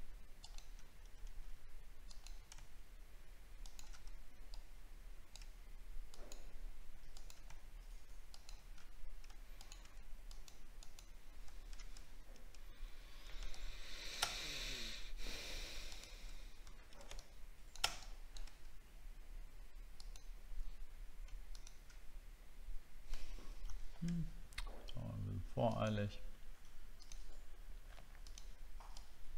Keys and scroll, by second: 12.1 alt+scroll down 1, 14.3-14.7 alt+scroll up 5, 15.2 alt+scroll up 1, 16.7 alt+scroll down 1.